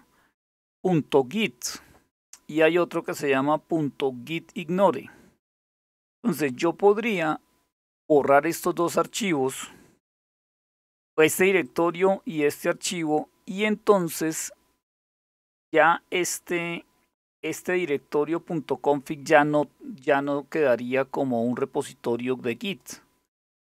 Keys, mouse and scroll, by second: 2.7-4.5 drag, 8.7-10.7 drag, 15.8-18.5 scroll up 1, 18.5-21.1 scroll down 2, 21.1-22.5 drag, 23.2-23.7 drag.